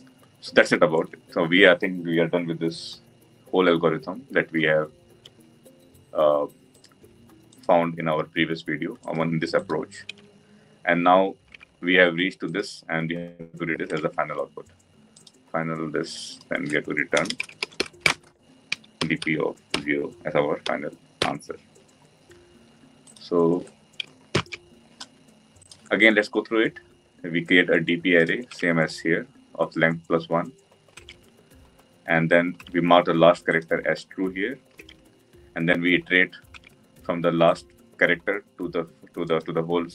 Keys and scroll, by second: 24.3 ctrl+alt+l.